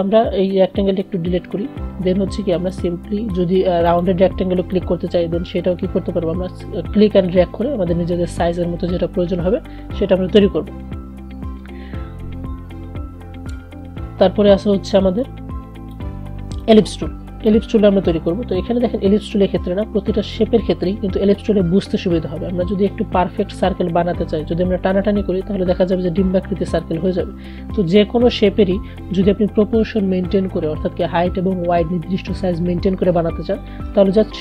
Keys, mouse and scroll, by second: 1.4 BackSpace, 2.7-10.0 drag, 14.2 BackSpace, 15.2-27.6 drag, 28.3 BackSpace.